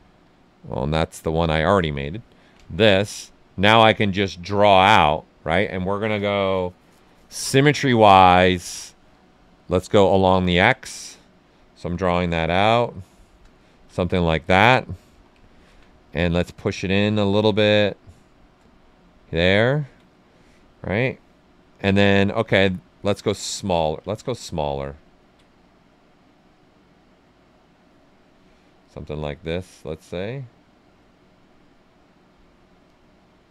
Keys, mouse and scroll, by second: 2.0 click, 2.1 alt+right click, 6.1 click, 11.2-13.5 drag, 13.5 ctrl+right click, 13.8 right click, 15.0 w, 15.4 alt+right click, 16.0-17.6 drag, 17.6 right click, 18.6 right click, 20.3 click, 21.6 right click, 23.2 click, 24.1 ctrl+z, 24.3 right click, 24.7 ctrl+right click, 25.6-28.1 drag, 28.1 right click, 28.8-31.1 drag, 31.1-32.8 drag, 32.8 click.